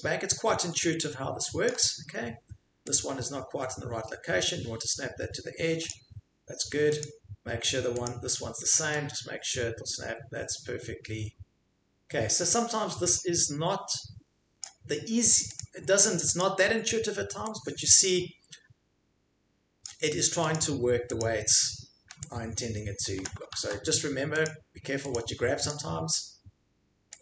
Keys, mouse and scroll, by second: 1.7 ctrl+click, 5.9 click, 7.0 click, 8.1 click, 14.6 click, 16.4 click, 19.8 click, 20.5 click, 21.2 click, 23.3 ctrl+click, 23.6 ctrl+z, 24.4 click, 25.2 click, 25.7 click.